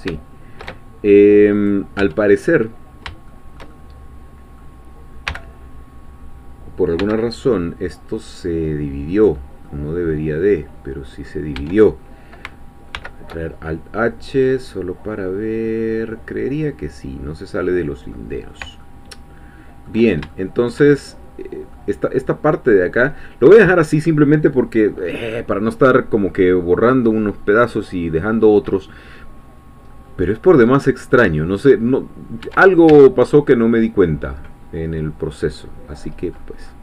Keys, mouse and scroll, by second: 0.1 ctrl+shift+z, 1.7 click, 2.9-3.3 scroll down 3, 3.3-4.8 shift+middle drag, 5.3 g, 7.0 x, 9.1 click, 9.7-11.5 middle drag, 11.5-12.2 scroll up 1, 12.2 Tab, 12.2-14.1 scroll up 1, 12.9 alt+h, 14.1-14.5 scroll down 1, 14.5-18.0 middle drag, 18.1-20.1 middle drag, 20.3-21.9 ctrl+shift+middle drag, 29.0 scroll down 2, 29.9-30.7 scroll up 1, 30.7 scroll up 1, 30.7 middle click, 31.1 middle click, 32.4 Tab, 33.7 middle click, 34.1-34.5 scroll up 4, 34.2 middle click, 34.5-35.9 middle drag, 35.9-36.8 scroll up 2.